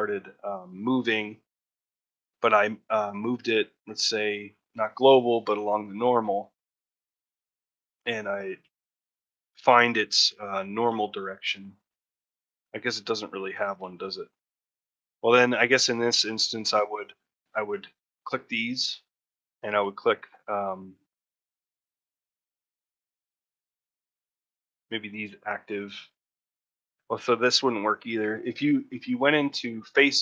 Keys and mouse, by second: 4.6-5.7 drag, 17.4 middle click, 18.9 middle click, 19.4 shift+middle click, 21.3 middle click, 22.6 shift+click, 23.2 middle click, 23.8-25.1 shift+middle drag, 25.6 middle click, 26.6 middle click, 29.8 middle click.